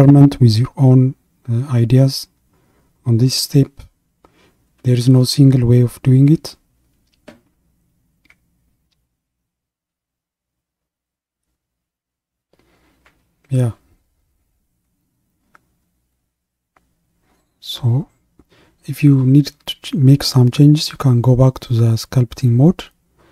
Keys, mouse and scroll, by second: 0.3-3.8 middle drag, 6.0-10.1 middle drag, 17.6-20.1 middle drag, 20.1 click, 21.8 click.